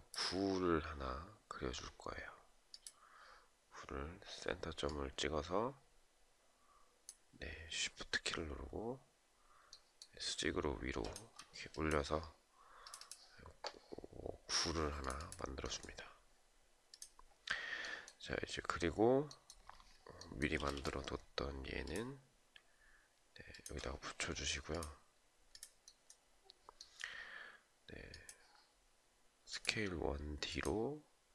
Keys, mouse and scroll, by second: 9.2 shift+right click, 9.7-10.2 shift+scroll down 1, 10.4 shift+click, 20.2 space, 22.8 shift+click.